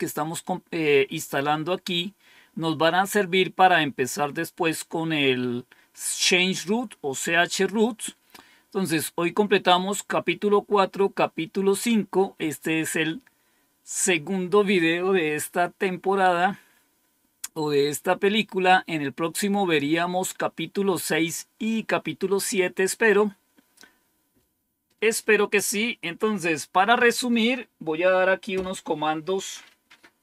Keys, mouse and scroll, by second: 1.7-2.3 scroll down 1, 2.3-4.8 scroll down 1, 4.8-5.4 scroll down 1, 5.4-7.7 scroll down 1, 7.7-8.4 scroll up 2, 8.4-9.6 scroll up 1, 16.5-17.2 scroll down 2, 19.2-19.9 scroll down 2, 19.9-20.8 scroll down 1, 20.8-22.5 scroll down 1, 22.5-24.1 scroll up 3.